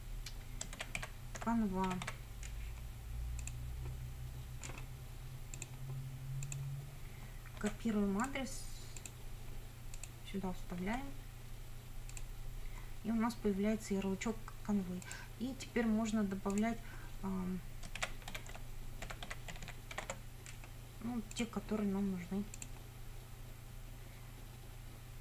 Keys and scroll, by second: 0.5-2.5 typing, 7.6 ctrl+c, 10.9 ctrl+v, 17.7-20.5 typing.